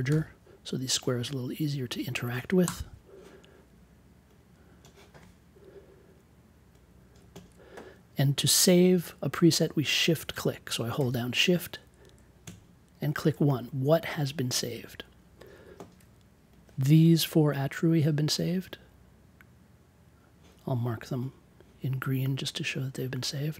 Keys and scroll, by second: 0.0 6, 2.6 Return.